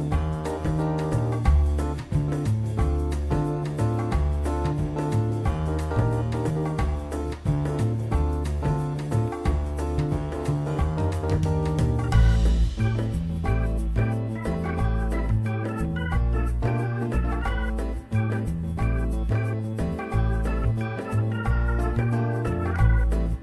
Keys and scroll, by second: 1.3 w, 3.1 F4, 3.7 w, 8.0 F4, 10.5 e, 10.9 r, 12.6 w, 14.9 F4, 16.1 F4, 17.7 F4, 23.0 t, 23.2 z.